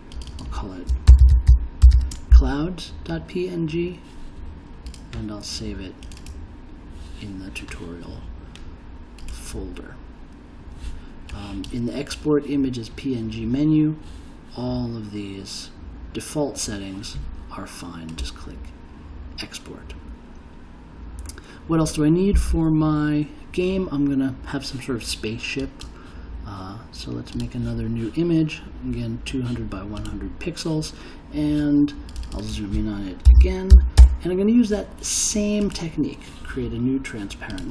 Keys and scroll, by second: 0.8-2.4 typing, 33.0-33.9 typing, 34.0 Return.